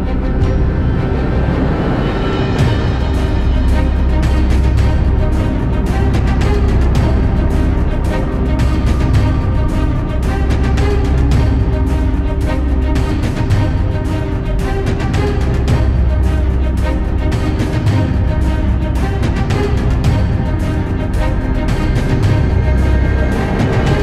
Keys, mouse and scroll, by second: 0.0 x, 1.6 click, 2.2 l, 4.1-5.6 drag, 6.7 KP_3, 7.4 shift+middle click, 7.8 s, 10.7 click, 11.3 g, 15.1 s, 16.6 KP_1, 17.8 ctrl+z, 18.6 click, 19.2 s, 20.3 KP_3, 21.6 s, 22.7 KP_1, 23.6 shift+middle click.